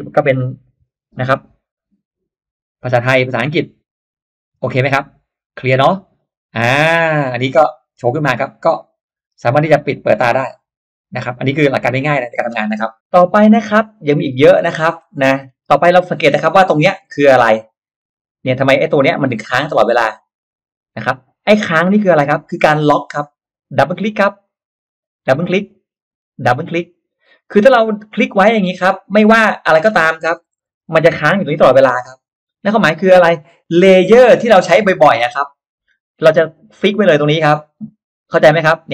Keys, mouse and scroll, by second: 10.1 click, 11.1 click, 11.7 click, 15.1 middle click, 15.1-16.0 scroll up 1, 24.3 click, 25.2 click, 26.4 click, 28.1-28.5 scroll down 1, 28.5 click, 29.4 click, 34.6-35.6 scroll up 2, 37.8 click, 38.2 click.